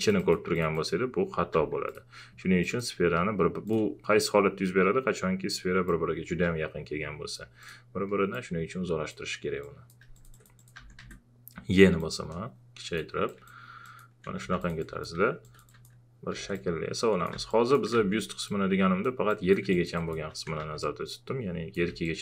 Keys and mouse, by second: 1.5 w, 1.9 click, 3.7 click, 5.8-9.6 drag, 10.1 alt+click, 10.5-11.5 typing, 12.0-13.4 drag, 13.8 alt+click, 14.4 w, 14.6 alt+click, 16.3 e, 16.5 click, 17.3 w, 17.5 click, 17.9 w, 18.5 click, 19.7 alt+shift+click, 20.1-22.2 typing, 20.8 click, 22.0 click.